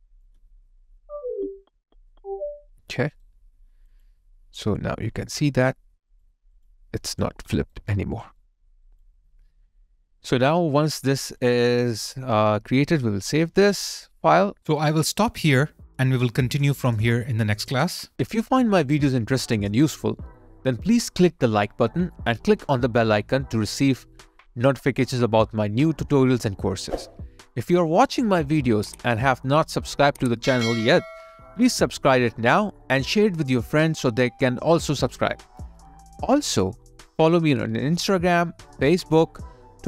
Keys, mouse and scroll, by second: 3.0 alt+right click, 4.8 alt+click, 6.5 double click, 7.6 alt+right click, 7.9 alt+click, 8.4 alt+right click, 9.0 alt+click, 10.5 alt+right click, 11.0 alt+middle click, 11.4 alt+click, 12.6 alt+right click, 13.5 ctrl+s, 32.8 ctrl+s, 32.8 alt+right click.